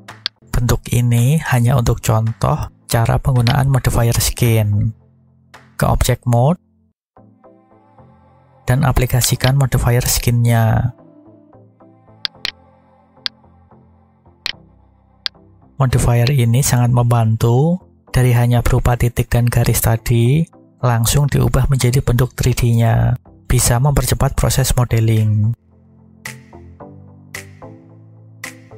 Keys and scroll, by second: 6.8 Tab, 27.3 Tab.